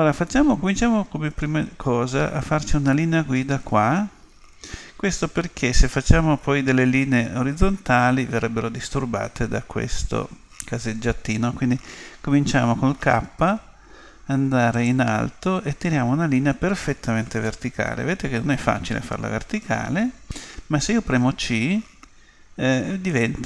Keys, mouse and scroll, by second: 12.9 k.